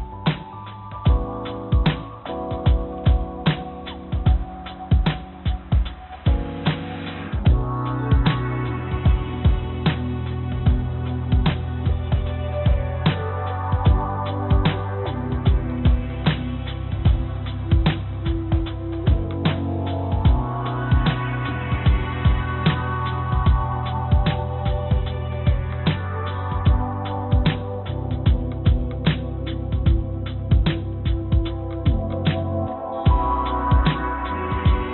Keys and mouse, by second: 0.4 Tab, 2.8 click, 3.7 click, 4.2 click, 5.0 click, 5.5 click, 6.0 click, 8.1 click, 9.1 click, 10.1-10.9 drag, 12.8 click, 17.1-19.5 drag, 20.4-21.4 drag, 24.3 click, 24.8 click, 30.2 click, 30.7 click, 34.3 click.